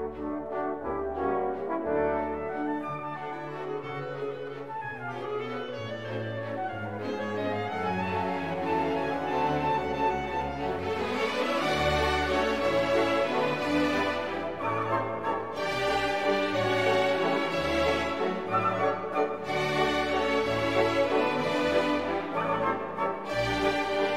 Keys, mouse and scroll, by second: 4.5 click, 5.4 click, 7.4 click, 10.3 click, 11.6 click, 12.4 click, 13.6-14.2 scroll down 1, 15.4-16.8 scroll up 8, 16.9-17.6 scroll down 4, 18.1 click, 20.8 click, 24.0 click.